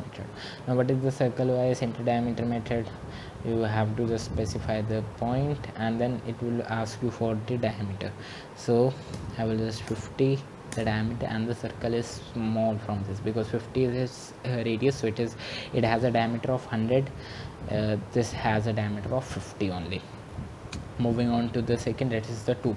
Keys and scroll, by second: 10.8-11.5 typing.